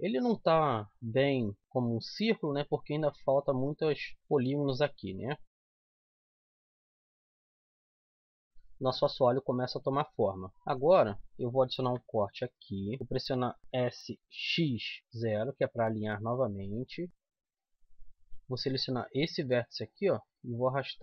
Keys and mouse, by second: 1.1 s, 5.2-6.7 middle drag, 6.7 z, 7.2 middle click, 7.8 KP_1, 8.1 KP_7, 8.6 z, 11.8 ctrl+r, 17.1 s, 19.1-20.4 middle drag, 20.4 click.